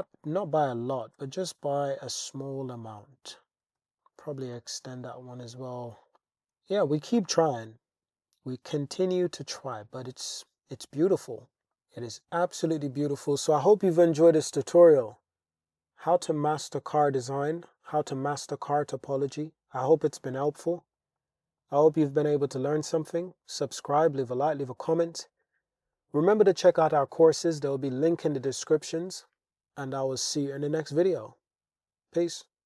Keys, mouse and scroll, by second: 0.0 click, 0.9 g, 1.2 y, 1.9 click, 2.8 click, 3.8 click, 3.8 g, 4.2 alt+z, 4.6 Tab, 5.6 alt+z, 6.2 click, 6.5 alt+z, 7.2-9.7 drag, 10.2-11.2 drag, 11.7 shift+click, 12.4-13.2 middle drag, 14.6-17.2 middle drag, 18.0-18.5 middle drag, 19.2-19.7 middle drag, 20.7-21.0 shift+middle drag, 21.2-21.6 middle drag, 22.8-23.8 middle drag, 24.2-24.6 shift+drag, 25.4 middle drag.